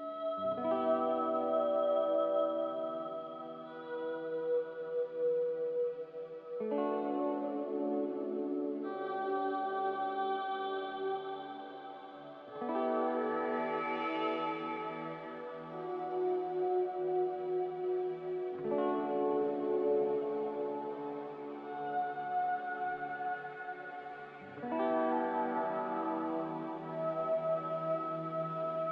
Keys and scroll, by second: 4.5 z, 24.0 x, 27.4 ctrl+z.